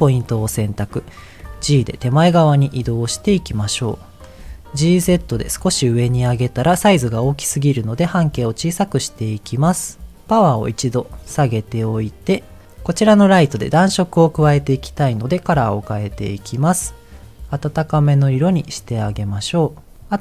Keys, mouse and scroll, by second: 4.0 click, 4.4 middle click, 5.0 g, 5.1 z, 5.8 click, 6.1 middle click, 8.3-10.2 shift+drag, 10.7-12.4 drag, 15.1 click.